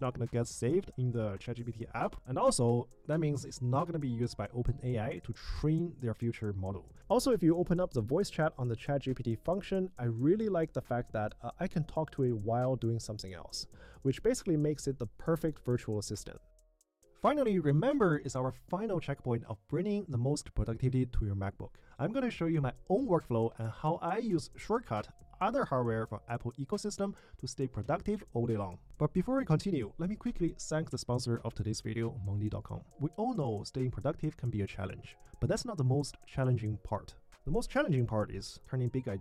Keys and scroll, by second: 0.5 Return.